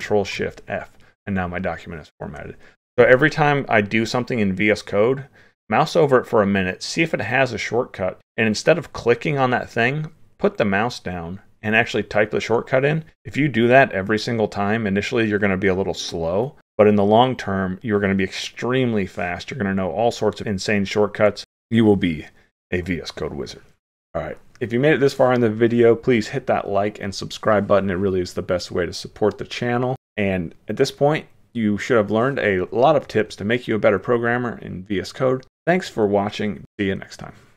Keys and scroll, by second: 0.1 alt+shift+f, 2.9 ctrl+shift+e.